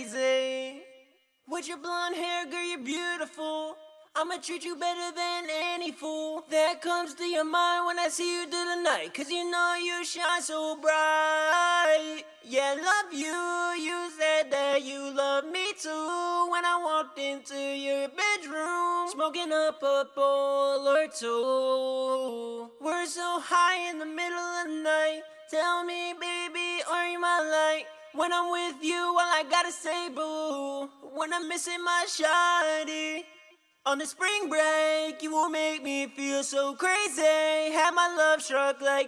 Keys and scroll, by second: 22.8-23.5 typing, 27.3-28.3 typing, 32.6-33.6 typing, 34.7-37.0 typing.